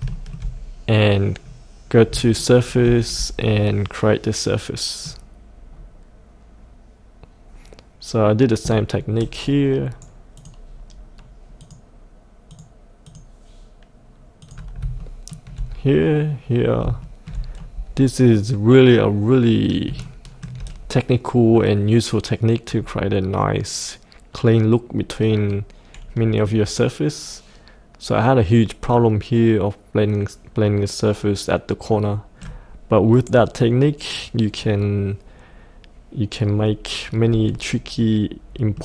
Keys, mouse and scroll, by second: 0.1 shift+middle click, 0.5-0.9 scroll up 1, 2.3 shift+middle click, 5.6-9.4 scroll down 1, 9.4 right click, 10.4 click, 15.0 shift+middle click, 17.0-19.1 shift+middle drag, 20.0 shift+middle click, 22.7-24.8 scroll down 1, 25.4-27.1 middle drag, 34.5 scroll up 1, 38.0 middle click.